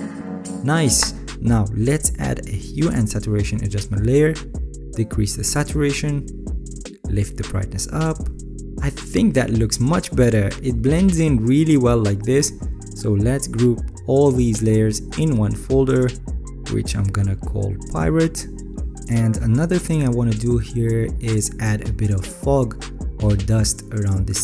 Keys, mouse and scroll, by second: 11.3-12.4 alt+scroll, 12.4-12.8 alt+scroll, 21.3-23.0 alt+right drag.